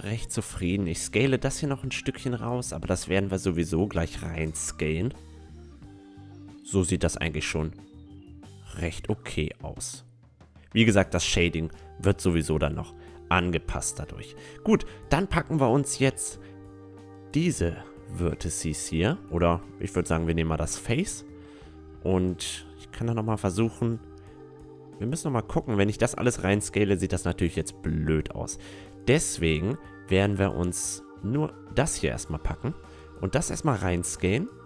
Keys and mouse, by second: 1.1 right click, 1.7 Tab, 2.6-4.2 middle drag, 6.6-8.6 middle drag, 11.6-14.8 middle drag, 12.6 Tab, 13.3 a, 13.8-15.7 right drag, 15.1 a, 15.7-17.5 middle drag, 16.7-18.6 right drag, 19.0-20.7 drag, 19.3 a, 19.7 a, 20.3-24.9 right drag, 24.7 s, 28.5-30.6 middle drag, 28.8 Tab, 29.8 Tab, 30.6-32.6 drag, 30.9 a, 31.7-33.5 right drag, 32.9 click, 33.2 s, 33.5 middle click.